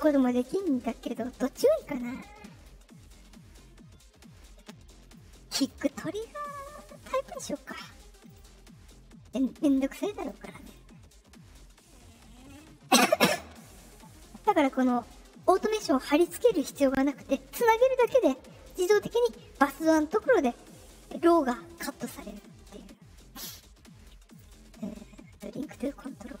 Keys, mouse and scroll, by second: 5.1 click, 8.2 click, 10.1 click, 15.4 click, 22.2 click, 24.3 click, 25.7 click.